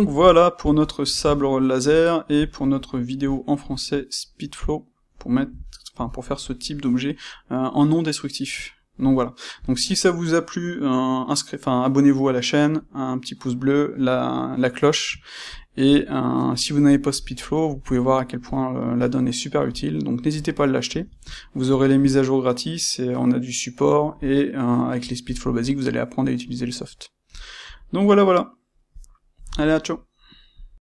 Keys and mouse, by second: 1.1-13.1 ctrl+shift+middle drag, 15.5 shift+middle click, 26.8 middle click, 27.7-30.9 middle drag.